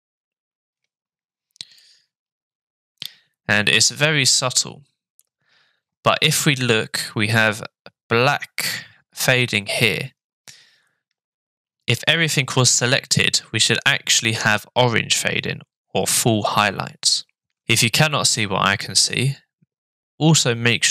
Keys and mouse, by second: 1.8-5.2 middle drag.